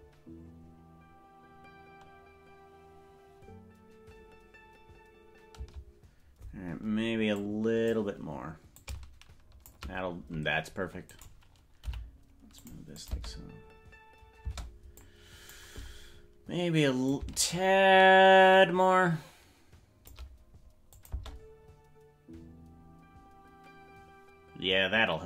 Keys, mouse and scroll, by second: 5.7 space, 7.4 click, 8.8 click, 11.1 right click, 11.9 g, 13.0 click, 13.3 space, 14.5 space, 15.0 click, 17.1-20.1 shift+drag, 21.0-24.8 drag, 21.3 space.